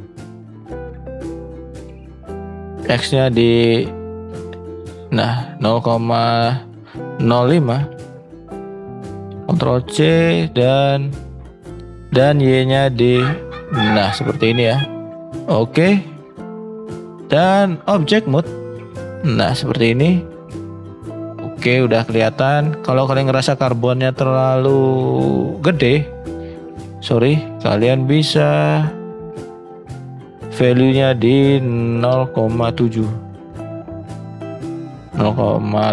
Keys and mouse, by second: 0.0 ctrl+z, 9.4-11.0 ctrl+drag, 12.5 ctrl+click, 16.1 shift+middle click, 26.1 click, 27.5 shift+middle click.